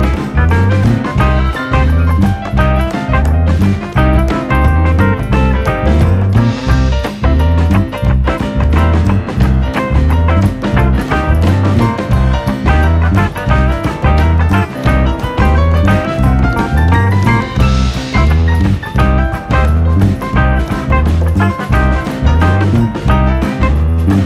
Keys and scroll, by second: 0.9 F9, 15.9 r, 16.3 r.